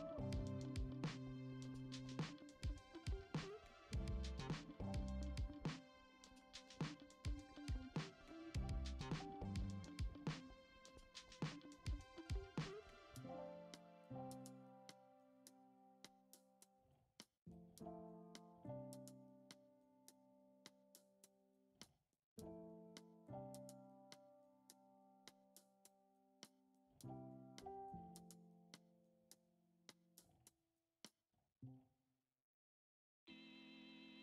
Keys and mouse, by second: 0.3 g, 1.5 shift+d, 2.5 r, 4.1 s, 6.4 g, 7.7-9.0 middle drag, 9.5 click, 9.8 l, 10.5-10.9 shift+middle drag, 11.4 shift+d, 15.0-15.6 middle drag, 16.1 shift+d, 17.9 middle drag, 18.3 middle click, 18.9-20.8 middle drag, 23.0 click, 23.2 l, 24.1 shift+d, 25.7 g, 27.1 g, 28.2 ctrl+Tab, 29.2 click, 30.0 ctrl+Tab, 31.3 click, 31.8 Tab, 32.7 alt+z, 33.1 click, 33.6 shift+click.